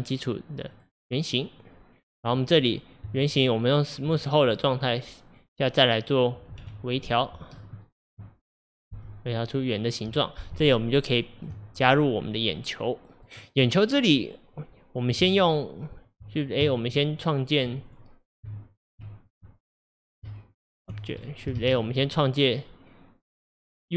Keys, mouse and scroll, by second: 0.8-1.5 drag, 1.5-1.9 scroll up 2, 2.2 click, 3.1 Tab, 4.9 click, 5.3 click, 6.7 1, 7.5 click, 8.9 g, 10.7 Tab, 11.9 drag, 12.2-12.6 scroll down 3, 12.7-15.2 middle drag, 15.2 Tab, 16.7 Tab, 17.9 click, 18.5 Tab, 20.3 Tab, 21.2 click, 21.6 shift+a.